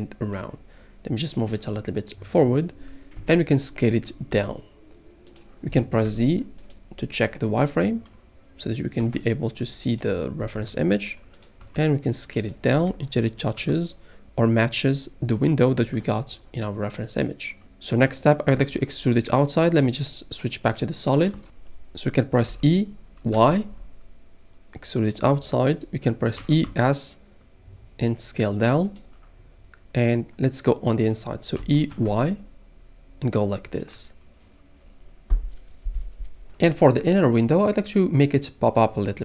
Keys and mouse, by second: 0.3 click, 1.8 middle click, 3.1 KP_1, 4.3 s, 5.3 click, 6.1 z, 9.0 g, 9.9 click, 10.4 s, 11.3 click, 11.6 g, 12.4 click, 12.7 s, 13.4 click, 13.9 g, 14.8 click, 17.9 middle click, 18.5 z, 22.5 e, 23.3 y, 25.1 click, 26.4 e, 26.8 s, 28.8 click, 31.6 e, 31.9 y, 33.8 click.